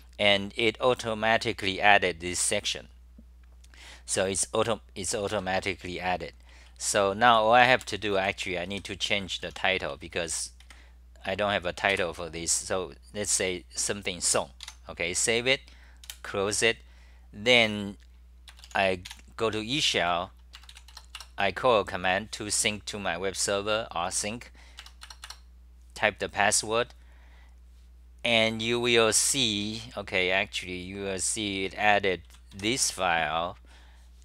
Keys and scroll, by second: 5.3 ctrl+g, 5.5-12.0 typing, 14.8 Home, 16.1 super+w, 21.2 Return, 26.7 Return, 31.0-33.1 typing.